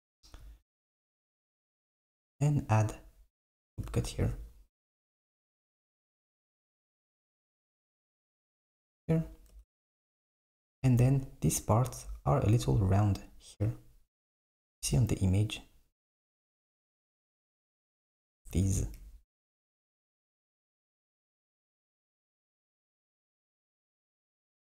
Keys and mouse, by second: 1.6 click, 4.2 r, 6.1 ctrl+b, 8.5 Tab, 9.7 Tab, 14.7 KP_1, 17.0 KP_3, 18.8 alt+z, 23.6 click, 24.0 alt+click.